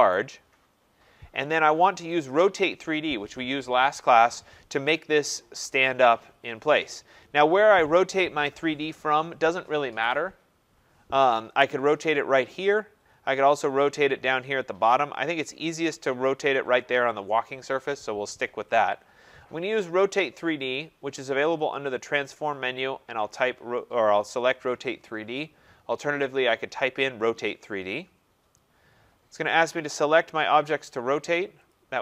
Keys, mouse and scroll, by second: 0.2 right click, 0.5-1.5 scroll, 2.3 click, 7.0 click, 20.8 click, 21.7 click, 26.5 click, 27.7 click, 29.7-31.6 drag.